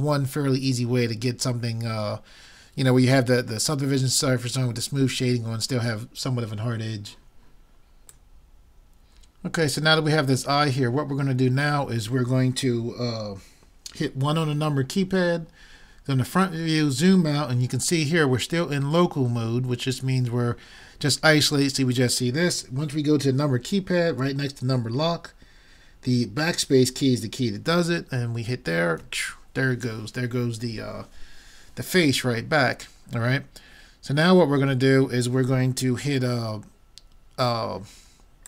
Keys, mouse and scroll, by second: 15.1 KP_1, 29.0 KP_Divide.